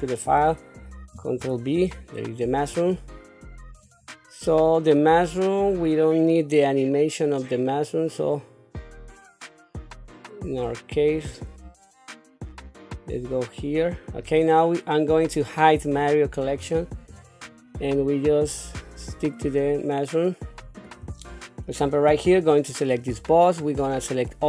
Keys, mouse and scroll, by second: 1.3 ctrl+v, 2.7 click, 3.8 click, 5.8-14.2 drag, 15.7 click, 16.5-17.0 scroll up 3, 17.0-17.4 scroll down 3, 18.4-20.8 drag, 21.3 shift+middle click, 22.3 click, 23.6 click.